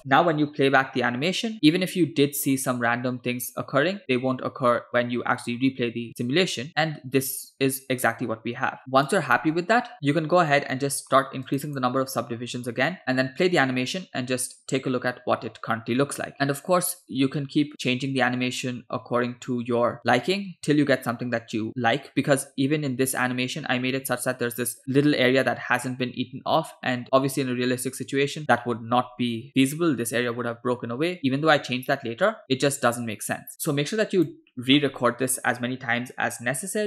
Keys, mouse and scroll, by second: 8.8 click, 9.9 click, 11.5 click, 13.0 space, 24.0 space, 27.0 space, 31.2-34.4 drag, 31.2 space.